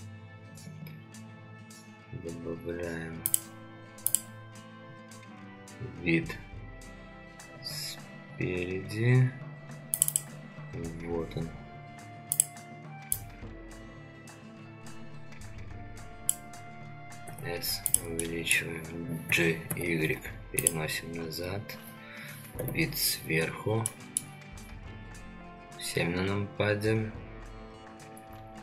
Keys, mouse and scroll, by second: 17.3 s, 18.2-18.6 middle drag, 19.3 g, 22.5 KP_7, 23.4 scroll down 2, 23.8-24.2 shift+middle drag.